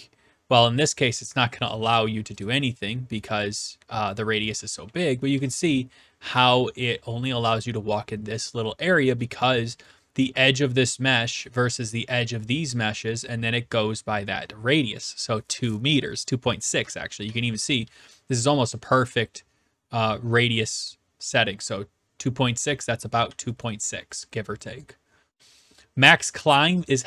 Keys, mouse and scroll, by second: 1.7 click, 2.5 click, 3.0-5.3 typing, 4.1 right click, 5.3 right click, 9.3-9.9 typing, 9.9-10.9 right drag, 11.4-12.5 right drag, 16.9-17.8 typing, 18.1-19.2 right drag, 23.3 d, 23.6-24.7 right drag, 25.4 s, 25.7 right click, 26.8 click.